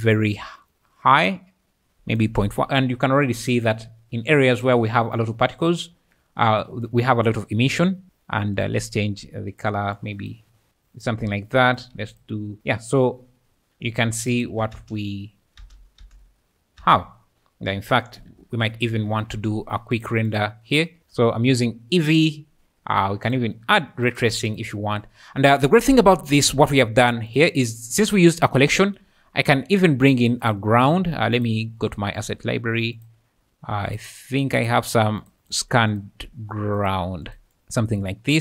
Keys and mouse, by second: 11.8 click, 14.4 shift+click, 14.8 space, 15.6 space, 16.0 space, 16.8 space, 18.8 ctrl+alt+KP_0, 20.3 click, 23.3 click, 24.1 click, 24.5 click, 26.5 `, 26.8 `, 27.3 click, 30.1 click, 31.4 click, 32.2 click, 33.0 click, 34.7 click, 35.9 drag, 36.8 click, 37.2 click.